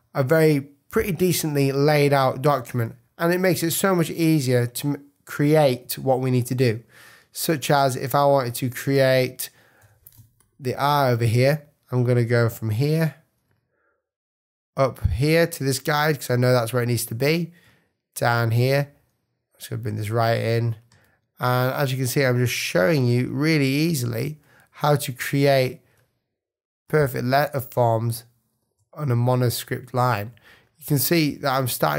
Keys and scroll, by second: 3.3 super+=, 4.1 super+space, 4.8 space, 5.5 space, 9.8 p, 10.1 space.